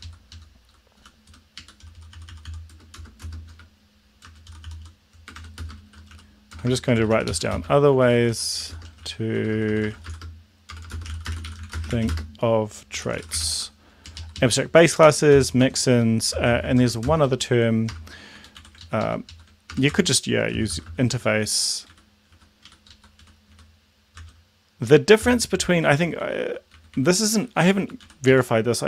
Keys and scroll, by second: 0.0 ctrl+Left, 1.1 Home, 1.4 Return, 1.6 Up, 2.2-3.6 typing, 4.4 Return, 4.7-14.2 typing, 14.7 Left, 15.0 End, 15.3 ,, 15.7 Return, 16.4 shift+space, 16.9 shift+', 17.0 shift+space, 17.9 BackSpace, 18.4 Up, 18.6 End, 18.8 ctrl+Left, 19.7-21.1 typing, 20.0 Return, 21.3 Down, 22.0 Up, 22.3 Down, 22.6 Up, 22.9 Left, 23.3 End, 23.5 Delete, 24.3 Return, 25.3 space, 25.5 space, 25.7 Delete, 25.8 Delete, 26.0 Delete, 26.3 Delete, 26.8 Delete, 27.0 Delete, 27.3 Up, 27.8 Delete, 28.3 Down.